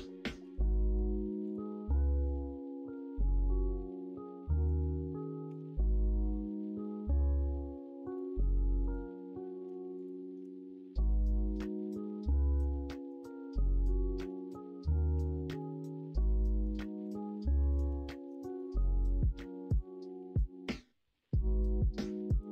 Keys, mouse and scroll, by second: 0.4 3, 2.5-5.4 drag, 5.4 e, 12.8 middle click, 13.4 middle click, 14.3 ctrl+z, 15.1 4, 16.3 alt+z, 17.6 ctrl+z, 18.4 middle click, 18.7 alt+z, 20.7-22.5 drag.